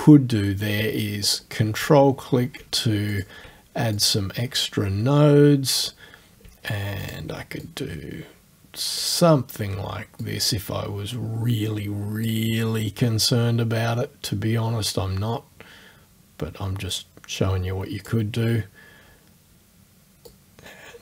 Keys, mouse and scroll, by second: 1.3 ctrl+click, 3.2 ctrl+click, 4.0-6.0 drag, 7.0 ctrl+click, 7.7-9.2 ctrl+drag, 10.3-12.4 drag, 17.0-18.3 drag, 20.3-21.0 drag.